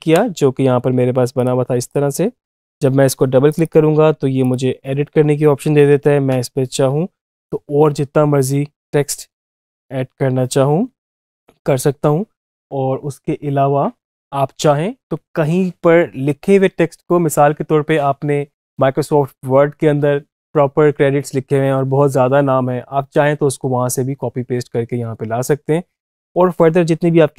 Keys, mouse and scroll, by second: 1.2 click, 5.8 Return.